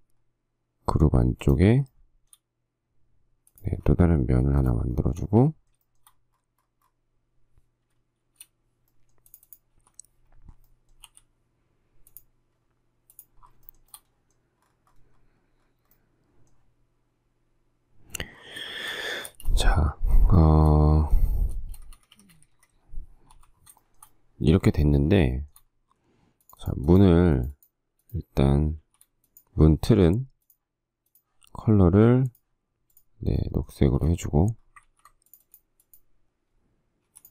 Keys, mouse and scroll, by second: 2.1 shift+middle click, 5.1 shift+space, 5.3 shift+middle click, 6.1 shift+middle click, 8.5 shift+r, 10.1 k, 11.5 m, 13.9 shift+middle click, 18.9 shift+middle click, 19.5 space, 20.6 shift+middle click, 20.7 shift+scroll, 21.7 space, 21.9 Escape, 22.2 Escape, 23.5 k, 24.0 shift+middle click, 24.9 shift+middle click, 25.2 shift+middle click, 29.0 shift+s, 34.1 space, 35.2 ctrl+z.